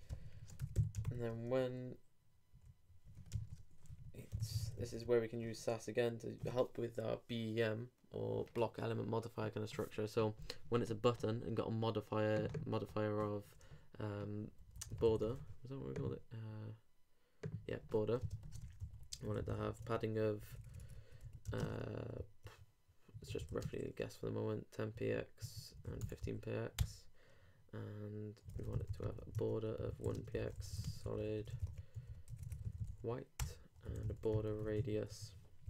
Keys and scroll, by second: 0.2-1.5 typing, 3.3 shift+BackSpace, 3.4 shift+7, 3.9 shift+-, 18.3 shift+space, 18.4 shift+[, 18.6 shift+Return, 21.4 shift+BackSpace, 21.6 shift+space, 22.2 shift+super+space, 23.1 super+i, 31.6 alt+BackSpace, 31.9 alt+w.